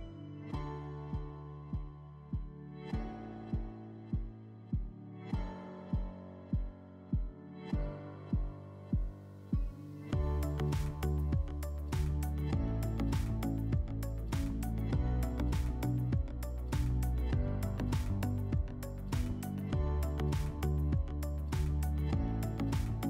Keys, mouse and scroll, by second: 1.8 alt+middle click, 3.1 middle click, 4.3-4.9 scroll, 10.1 alt+w, 11.4 click, 14.2 alt+middle click, 15.8 click, 16.4 click, 17.2 click, 18.0 click, 20.6 click, 21.5 click.